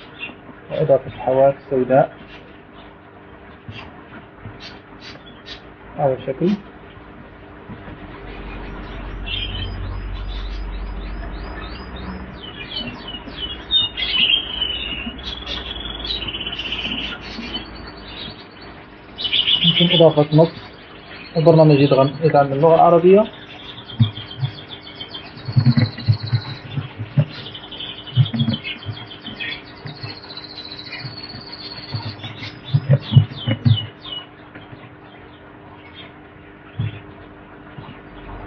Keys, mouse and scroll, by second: 2.7 ctrl+click, 5.4 click, 6.2 shift+click, 7.9 click, 9.4 Delete, 11.2 click, 12.4-14.5 drag, 15.5 shift+click, 17.9 shift+click, 20.0 click, 22.2 click, 25.7 f, 26.1 v, 27.1-29.0 typing, 30.5 alt+shift+s, 30.9 alt+v, 31.5 g, 33.0-34.9 typing, 35.3 alt+shift+d, 36.3 BackSpace.